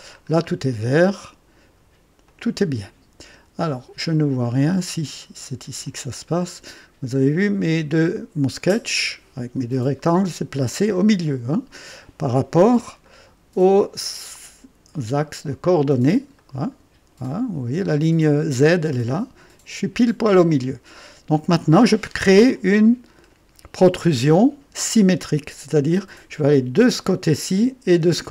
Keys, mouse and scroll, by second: 0.2-0.6 scroll down 1, 0.8 right click, 2.2 click, 4.5 scroll up 1, 5.2-5.7 right drag, 5.8-6.9 drag, 7.6 scroll up 1, 8.1-8.7 right drag, 11.0-12.1 drag, 11.1 typing, 12.6 KP_3, 13.0-13.9 right drag, 15.4 click, 16.3 right click, 18.9-19.6 right drag, 20.3-21.5 drag, 22.5-24.8 drag, 24.8 typing.